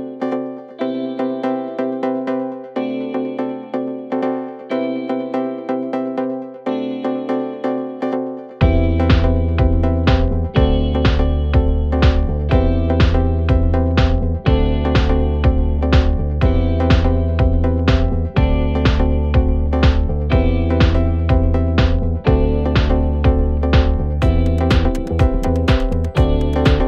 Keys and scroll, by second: 0.7 ], 3.1 4, 4.8 3, 5.0 ], 5.7 ], 7.7 ,, 8.2 ,, 9.1 ,, 10.2 4, 11.9 3, 13.4 4, 15.6 3, 16.7 ], 19.3 4, 19.7 5.